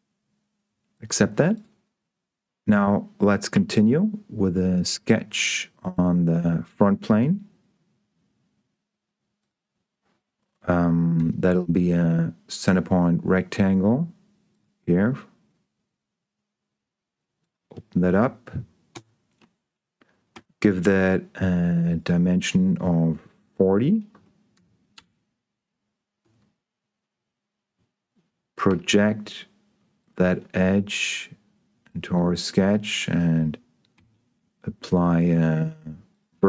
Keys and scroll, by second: 3.8 s, 11.6 s, 19.2 Escape, 20.6 d, 24.1-25.0 typing, 26.2 Escape, 29.0 p, 34.2 s.